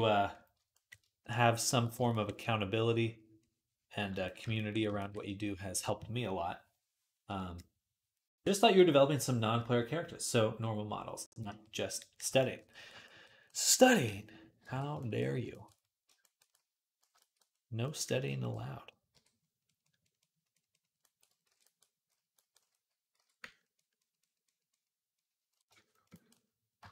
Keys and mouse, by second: 4.6 right click, 5.1-12.1 right drag, 14.5 alt+q, 20.9 j, 21.3 alt+q, 23.0 x.